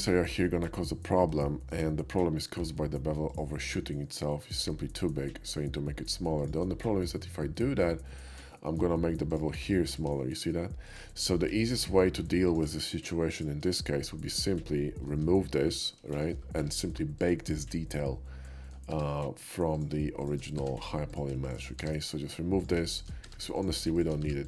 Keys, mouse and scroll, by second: 0.1 middle click, 1.5 shift+middle drag, 2.6 q, 3.3 click, 6.4 shift+click, 6.7 shift+middle click, 7.1-7.8 shift+middle drag, 8.1-8.4 shift+middle drag, 8.6 shift+middle drag, 9.6 q, 9.9 click, 10.5 shift+q, 10.9 click, 11.2 middle click, 11.4-12.0 middle drag, 12.2 q, 12.4 click, 12.8 shift+q, 13.4 drag, 13.7-14.1 middle drag, 14.6-15.1 shift+middle drag, 15.9 shift+middle click, 16.1 shift+middle drag, 16.6 Tab, 17.1 click, 17.5-18.8 middle drag, 19.7 click, 20.2 shift+click, 20.6 1, 21.2 click, 21.5 shift+click, 21.8 1, 22.6 click, 22.9 shift+click, 23.3 1, 23.6 click, 23.9 shift+1.